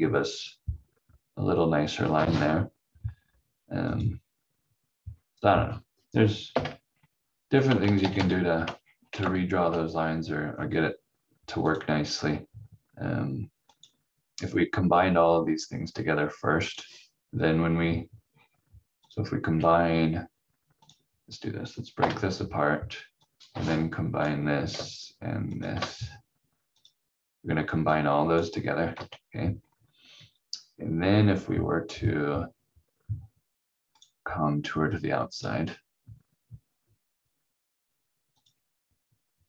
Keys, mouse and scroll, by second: 3.9 click, 4.9-5.3 scroll down 1, 6.5 Delete, 7.8 ctrl+z, 7.9 ctrl+z, 8.1 ctrl+z, 8.7 scroll up 1, 9.2 ctrl+z, 10.5-11.7 scroll up 1, 11.7 click, 18.3 scroll down 1, 19.0 click, 19.5 v, 20.8 click, 21.9 Delete, 23.2 click, 25.4 shift+click, 28.9 ctrl+z, 29.5-31.9 scroll up 1, 33.9 click.